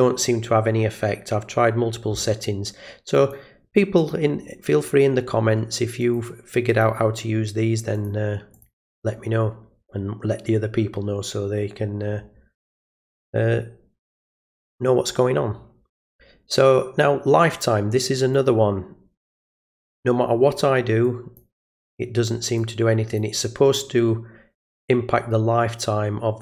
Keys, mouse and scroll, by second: 3.1 click, 4.0 click, 6.0 click, 6.7 click, 7.9 click, 8.5 click, 18.3-19.5 drag, 21.0 click, 22.6 click.